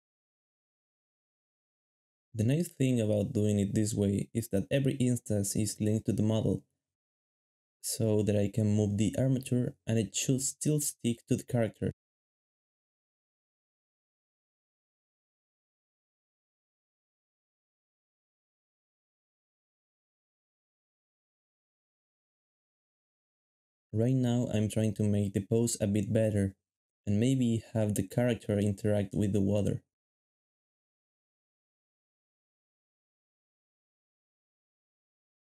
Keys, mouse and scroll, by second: 0.6 shift+middle click, 0.9 ctrl+shift+Tab, 2.3 shift+middle click, 2.7 shift+double middle click, 5.4 g, 7.6 shift+middle click, 8.3 shift+g, 9.9 g, 13.1 g, 17.0-18.1 typing, 19.7 g, 21.0 g, 22.6 g, 23.6 g, 24.1 shift+double middle click, 24.7-26.0 typing, 29.0-30.1 typing, 33.2 typing, 34.3 g.